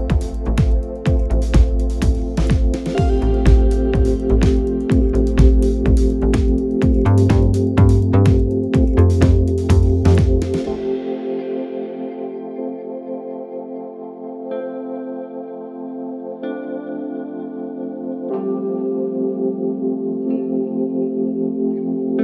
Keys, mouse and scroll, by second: 1.7-4.8 drag, 5.7-7.0 middle drag, 7.0-10.0 drag, 10.6-14.2 right drag, 15.9 KP_0, 18.2-21.3 drag, 21.8-22.2 scroll down 1.